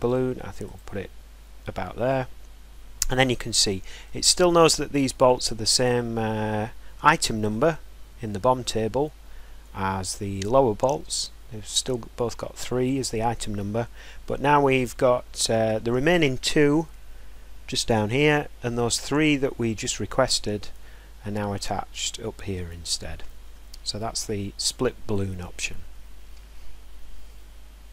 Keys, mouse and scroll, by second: 1.0 click, 1.0 scroll, 4.1 middle click, 4.3-4.7 scroll up 2, 4.9 scroll, 4.9 middle click, 5.9 scroll, 6.1 scroll down 1, 9.4 scroll down 1, 10.3 scroll up 2, 11.3 scroll down 4, 11.6 scroll, 12.9-14.5 scroll down 4, 14.5 scroll, 14.6-15.3 scroll down 1, 18.9 scroll, 20.1-20.8 scroll, 23.0 scroll, 23.5 scroll, 24.3-24.9 scroll down 1, 25.0 middle click, 25.7 middle click.